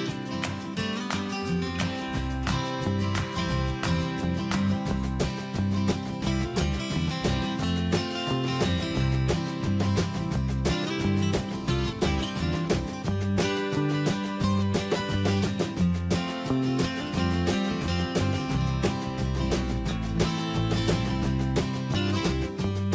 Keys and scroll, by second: 8.5 ctrl+Return, 18.3 ctrl+space.